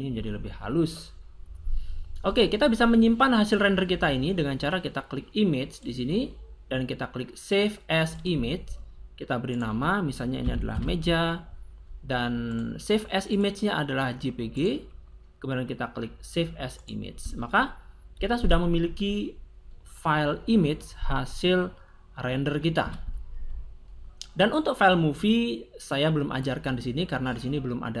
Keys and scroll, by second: 10.2 m, 10.4 e, 10.7 j, 10.7 a, 22.7 Escape.